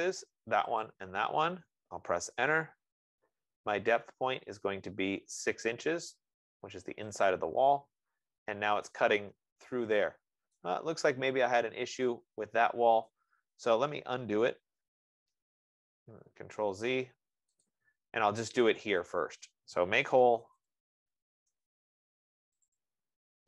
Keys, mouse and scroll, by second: 0.6 click, 1.1 click, 7.2 Return, 7.8 click, 10.9 right click, 13.5 right click, 16.5 ctrl+z, 18.0 click, 19.5 click, 20.2-21.8 typing, 23.1 click.